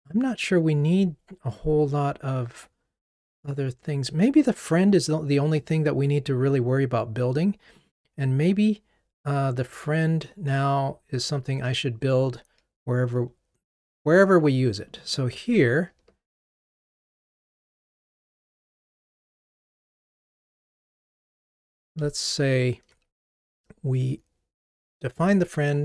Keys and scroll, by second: 19.6 super+c, 22.3 super+v.